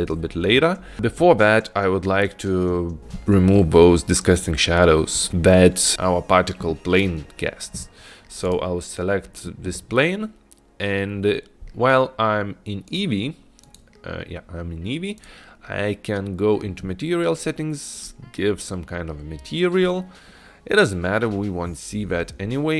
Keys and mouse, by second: 8.5 click, 13.0 click, 18.0 click.